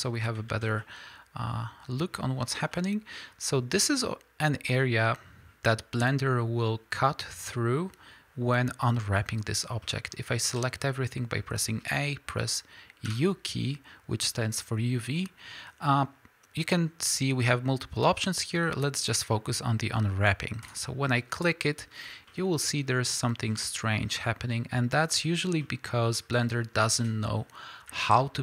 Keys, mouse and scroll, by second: 0.5 alt+a, 0.8-2.0 middle drag, 2.7 middle click, 10.5 a, 28.2 alt+a.